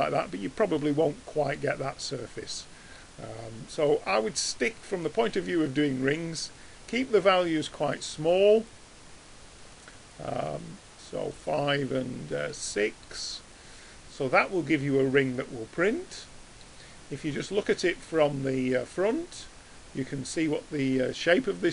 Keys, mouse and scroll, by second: 1.0-1.8 middle drag, 2.6-3.0 middle drag.